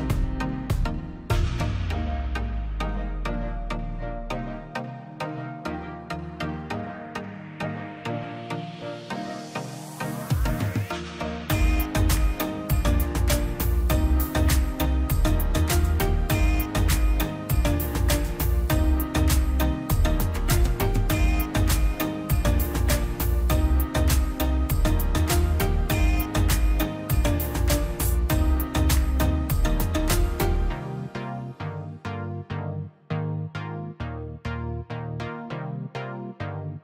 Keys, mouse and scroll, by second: 0.7-4.2 drag, 4.6-4.9 scroll down 1, 5.1 click, 5.4-5.8 scroll up 1, 5.8 click, 6.1 scroll down 1, 6.3 middle click, 7.0 scroll down 1, 7.3 middle click, 7.5 scroll up 1, 8.1 middle click, 9.0 click, 9.0 click, 9.4 middle click, 9.9-10.8 scroll down 1, 10.8 middle click, 11.9 click, 12.1-12.5 scroll up 1, 12.5 click, 13.6 Escape, 13.9 click, 16.2 click, 16.6 scroll down 1, 17.0 click, 17.2 scroll up 1, 17.9 click, 18.1 scroll down 1, 18.4 middle click, 19.2 click, 20.4 scroll down 1, 20.6 middle click, 20.9 scroll up 1, 21.5 click, 23.3 click, 23.7 scroll up 1, 24.0 click, 24.7 Escape, 25.6 click, 27.7 Escape, 27.7 scroll up 1, 29.1 ctrl+click, 30.1 Escape, 30.9 click, 34.1 click.